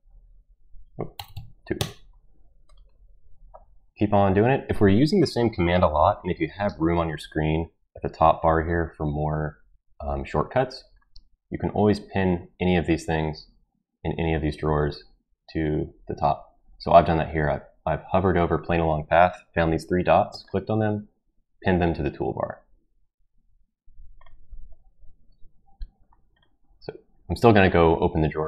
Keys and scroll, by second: 0.0 2, 1.1 BackSpace, 1.2 BackSpace, 1.3 2, 1.8 Return.